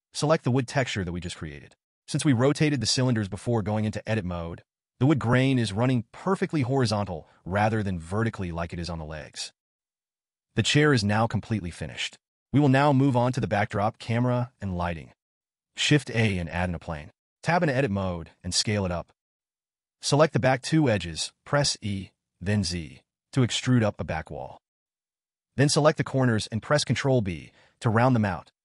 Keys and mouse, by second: 2.1-3.1 drag, 3.4 click, 4.9-5.5 drag, 7.4-8.6 drag, 14.2 click, 14.8 shift+a, 16.6 Tab, 17.0 s, 23.2 e.